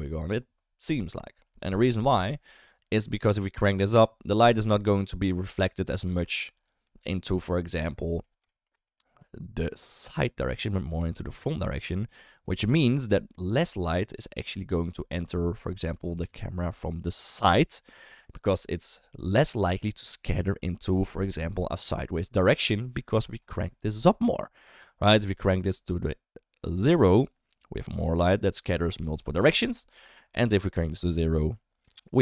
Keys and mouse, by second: 3.0-4.0 drag, 7.8-8.1 middle drag, 8.4 shift+middle click, 8.7 middle click, 9.1-12.5 typing, 9.9 drag, 10.3 click, 11.1 click, 11.5 drag, 12.6-14.1 right drag, 14.3-14.7 middle drag, 14.9 shift+middle drag, 15.8 KP_1, 16.2 KP_3, 17.2 shift+middle drag, 25.4-27.3 drag, 30.5-31.9 drag.